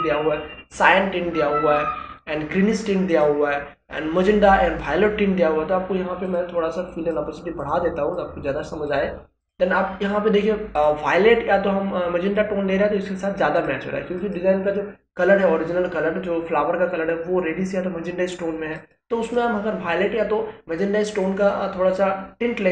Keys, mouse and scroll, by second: 3.1 click, 18.8 click.